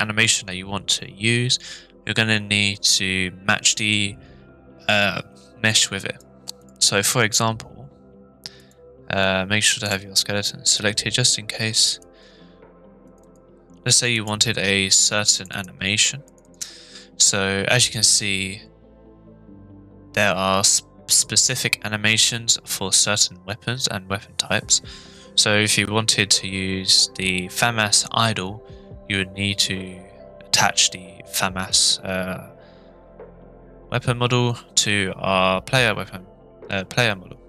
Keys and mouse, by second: 6.0 drag, 6.6 click, 8.6 click, 9.8-10.5 drag.